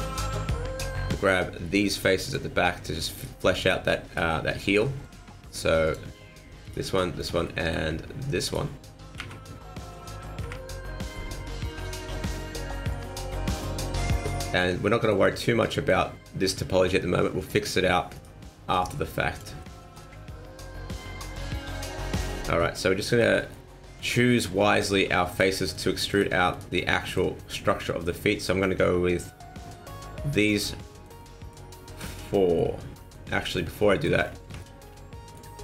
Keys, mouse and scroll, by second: 0.1 middle click, 2.3 click, 3.1 click, 3.1 right click, 3.1 m, 3.6 right click, 4.1 right click, 5.9 click, 6.6 right click, 7.2 shift+right click, 7.5 middle click, 8.5 shift+right click, 9.2 KP_1, 10.4 KP_3, 12.1 click, 13.3 middle click, 15.6 middle click, 17.4 click, 18.1 right click, 18.8 click, 19.6 middle click, 21.3 click, 22.6 middle click, 23.4 shift+middle click, 23.7 middle click, 24.7 scroll up 1, 25.3 right click, 25.7 shift+right click, 26.1 shift+right click, 26.5 right click, 26.9 middle click, 27.5 shift+right click, 27.8 middle click, 28.7 scroll up 1, 30.5 middle click, 31.2 middle click, 32.5 middle click, 33.2-33.8 scroll down 6, 33.8 shift+middle click, 33.9 shift+middle click, 34.2-34.6 scroll down 2, 34.6 shift+middle click, 34.9 middle click, 35.5-35.6 scroll down 2.